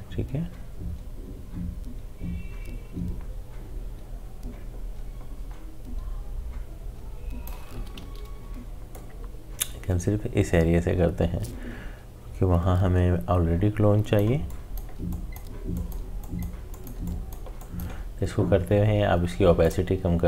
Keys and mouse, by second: 8.0 ctrl+z, 8.9-20.2 drag.